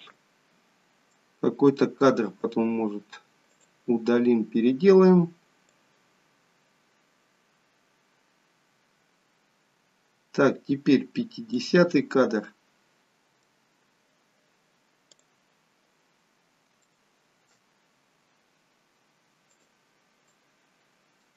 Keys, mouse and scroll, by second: 0.5-1.8 scroll down 4, 1.2 middle click, 3.5 click, 5.9 click, 13.0 middle click, 13.8-14.4 scroll up 2, 14.4-15.4 scroll up 1, 15.4 click, 16.9 shift+middle click, 19.6 click, 20.4 middle click.